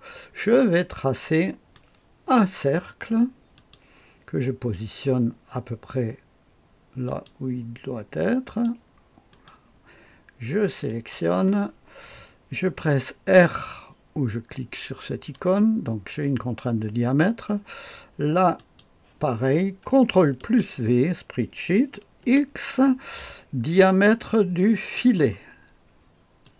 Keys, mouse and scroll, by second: 0.5-1.7 right drag, 3.5 click, 7.0 click, 8.4 click, 9.2 click, 9.2 right click, 10.8 click, 15.3 r, 18.5 click, 20.3 ctrl+v, 22.2 x, 24.9 click, 26.4 click.